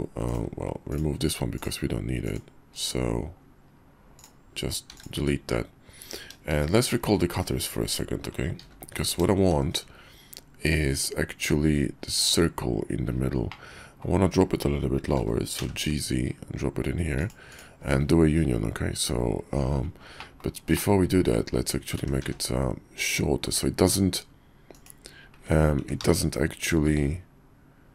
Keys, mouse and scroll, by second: 0.2-3.7 drag, 4.9 x, 6.5 shift+2, 8.6 alt+h, 9.5 shift+2, 12.3 click, 13.5-14.0 drag, 15.1 g, 20.2 middle click, 20.3 drag, 20.7 drag, 20.9-21.3 middle drag, 22.0 s, 24.7 click, 25.8 s.